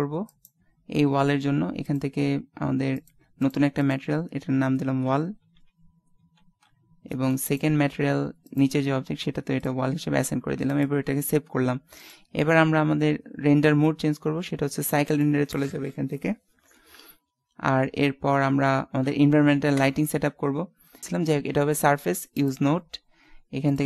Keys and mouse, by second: 0.5 right click, 1.9 click, 1.9 right click, 2.6-5.7 drag, 7.5-9.2 right drag, 8.5 click, 9.2-10.3 middle drag, 10.5 ctrl+s, 19.8 KP_0, 22.4-23.8 drag.